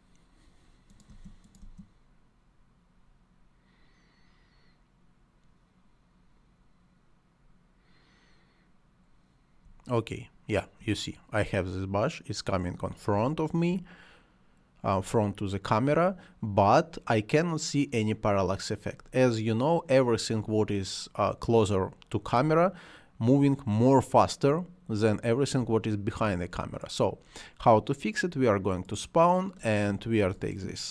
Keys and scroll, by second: 1.1 space, 9.6 space, 13.1 space, 15.0 space, 19.0 space, 22.4 space, 25.6 space.